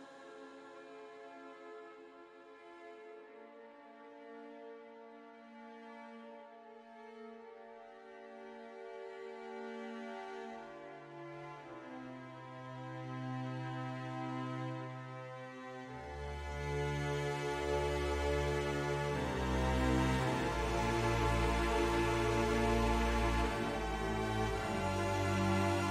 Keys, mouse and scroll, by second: 0.0 middle click, 0.3-1.6 middle drag, 2.0 middle click, 4.1 click, 5.7 click, 6.6-7.9 middle drag, 8.7 middle click, 10.3 middle click, 11.2 middle click, 11.8 click, 14.6 click, 15.0 shift+middle click, 16.1 click, 17.0 ctrl+z, 17.7 middle click, 19.7 middle click, 23.5 middle click.